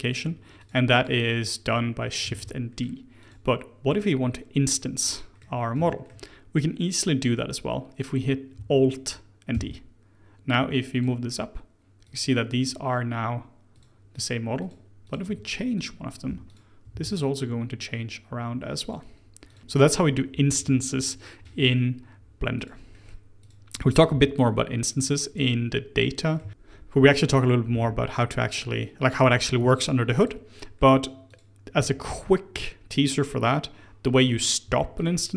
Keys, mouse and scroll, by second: 0.5 click, 0.9 click, 1.3 middle click, 2.3 shift+d, 5.0-9.0 middle drag, 9.5 alt+d, 12.0 click, 12.5 click, 13.7 click, 14.1 click, 14.5 click, 15.0 click, 15.2 Tab, 15.7 click, 16.2 3, 16.4 click, 16.8 g, 19.4 click, 19.6 g, 22.9 middle click, 23.3 click, 24.0 g, 26.0 middle click, 26.5 click, 27.2 click, 27.7 g, 29.4 middle click, 30.1 click, 30.5 middle click, 31.2 click, 31.7 g, 34.6 Tab, 34.9 click.